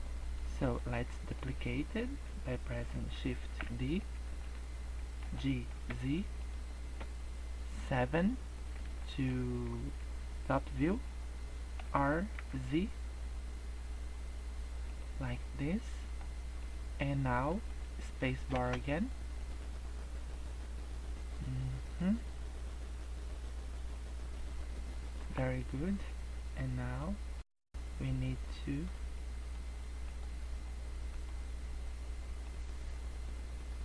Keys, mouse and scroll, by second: 0.3 middle click, 0.5 click, 1.0 middle click, 3.3 shift+d, 5.2 g, 7.9 KP_7, 8.9 shift+middle click, 11.8 r, 15.4 middle click, 16.5 middle click, 17.6 middle click, 18.4 space, 25.3 Escape, 26.5 click, 27.4 click, 29.2 middle click, 30.0 click, 31.1 click, 32.7 click.